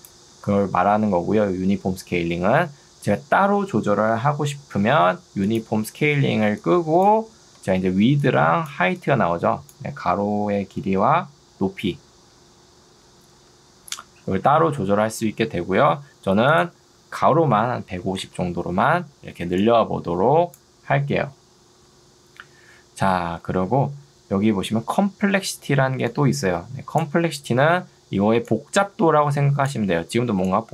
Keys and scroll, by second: 6.4 ctrl+2, 7.6 Escape, 8.2 ctrl+2, 13.4 Escape, 17.6 5, 18.2 Return, 19.2 ctrl+2, 21.8 Escape, 25.6 ctrl+2.